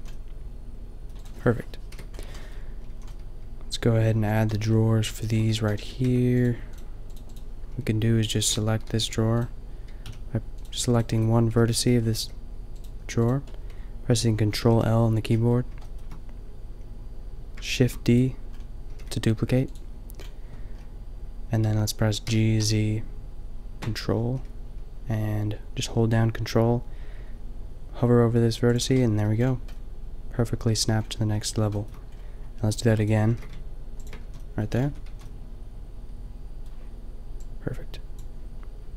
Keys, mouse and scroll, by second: 2.0 KP_5, 2.9 a, 6.1 Tab, 8.4 ctrl+l, 8.9 g, 10.0 a, 11.6 g, 12.3 g, 13.2 g, 14.7 ctrl+l, 17.7 shift+d, 18.9 g, 20.2 middle click, 22.2 g, 29.0 click, 29.2-30.4 middle drag, 32.9 shift+d, 33.2 click, 33.2 g, 34.2 a, 34.3 click, 34.9 Tab, 35.1 a, 38.2 Tab, 38.2 a.